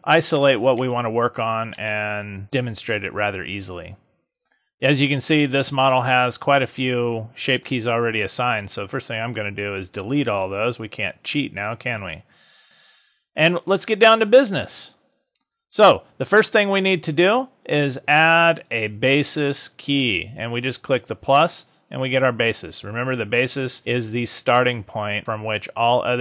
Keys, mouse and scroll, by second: 0.7 KP_3, 1.7 KP_1, 7.0 click, 8.8 click, 17.5 click, 19.5 click.